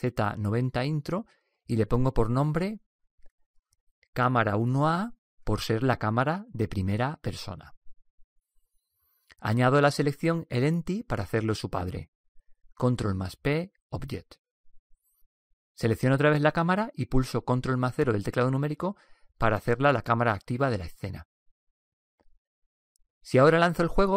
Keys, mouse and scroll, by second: 0.1 r, 3.6-5.5 drag, 11.1-12.9 right drag, 13.3 ctrl+p, 16.5 right click, 18.2 ctrl+KP_0.